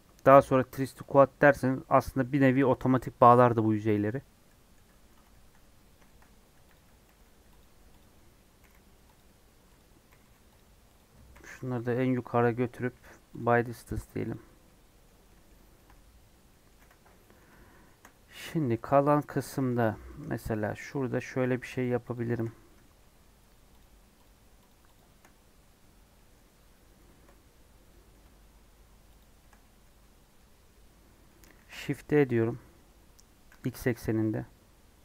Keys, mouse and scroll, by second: 1.8-4.8 middle drag, 4.8-6.5 scroll up 3, 5.3 shift+middle click, 6.0 shift+middle click, 6.7 click, 7.1 g, 8.0 click, 8.6 g, 9.7 click, 10.1 g, 10.9 click, 11.3 g, 12.6 a, 13.4 m, 13.6 scroll down 2, 14.3 click, 14.6 middle click, 15.0 scroll up 2, 15.3 middle click, 16.0 scroll up 1, 16.3 scroll down 1, 16.5 middle click, 16.8 Tab, 17.0 scroll down 1, 17.2-19.8 middle drag, 19.8 Tab, 20.1 3, 20.9 click, 21.0 scroll up 1, 21.8 shift+Left, 22.1 shift+Left, 22.5 scroll up 2, 22.7-23.8 middle drag, 23.8 shift+Left, 24.2 shift+Left, 24.9 shift+Left, 25.8-26.1 scroll up 1, 26.1-27.1 middle drag, 27.1 KP_Decimal, 27.9-29.2 middle drag, 29.2 shift+click, 29.6-31.5 middle drag, 31.5 shift+d.